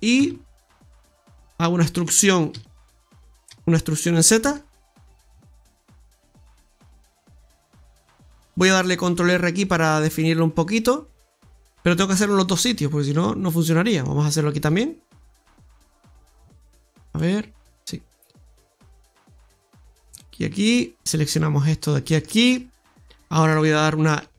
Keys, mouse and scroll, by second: 1.1 ctrl+z, 1.1 click, 1.9 middle click, 2.4 click, 3.4 r, 4.1 e, 7.2 middle click, 8.3 shift+middle click, 8.3 scroll up 1, 9.1 ctrl+r, 11.0-11.6 scroll down 3, 11.6 middle click, 12.2 ctrl+z, 12.3 ctrl+z, 12.6 ctrl+z, 13.4 middle click, 15.2 ctrl+shift+right click, 17.1 middle click, 18.4 right click, 19.5 ctrl+shift+right click, 20.1 middle click, 21.8 shift+right click, 22.2 ctrl+shift+right click, 22.7 middle click.